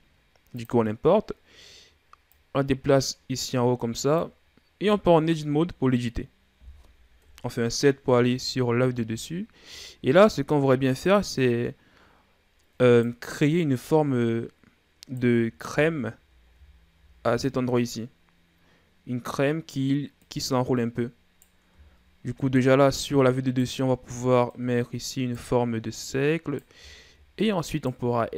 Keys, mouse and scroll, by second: 2.1-4.7 drag, 4.7 Tab, 7.0 KP_7, 8.6-9.7 shift+scroll up 3, 9.7 scroll up 1, 10.8 right click, 13.7 right click, 15.7-16.5 shift+scroll down 1, 16.5-17.3 scroll down 2, 17.3 right click, 20.0 right click, 21.7-22.5 shift+scroll up 5, 22.5 right click, 24.3 right click, 26.7-27.4 shift+scroll down 2, 27.5 right click, 28.0 e.